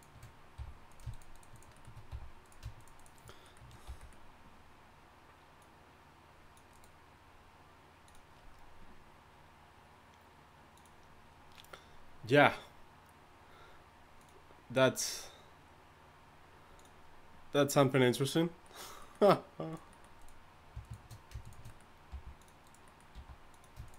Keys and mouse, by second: 0.6 f, 2.1 f, 3.9 f, 19.7-22.6 drag, 22.1 g, 23.1 g.